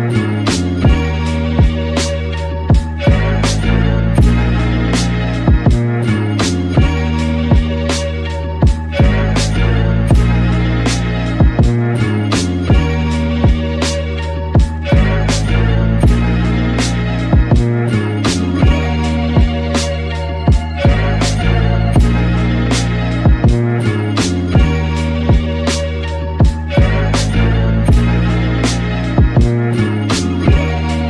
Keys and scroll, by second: 10.1 super+z, 16.3 super+z.